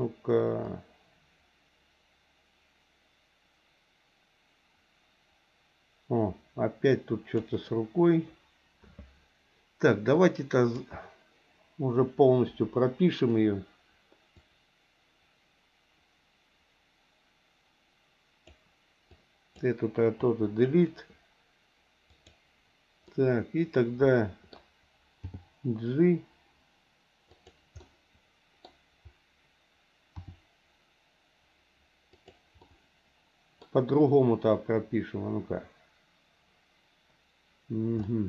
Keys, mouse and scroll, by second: 0.7-7.5 drag, 10.1 click, 10.3 click, 12.5 Delete, 14.4-18.5 drag, 19.1 click, 20.2 Delete, 22.1 click, 23.1-24.5 middle drag, 25.2 g, 27.8 middle click, 30.2 r, 32.6-33.6 middle drag, 38.0 middle click.